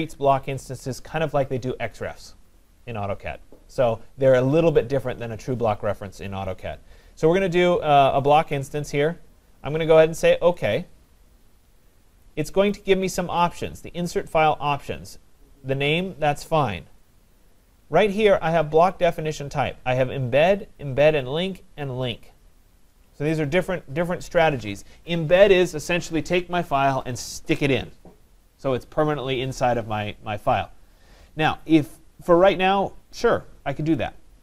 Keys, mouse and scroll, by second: 10.8 click, 12.7 click.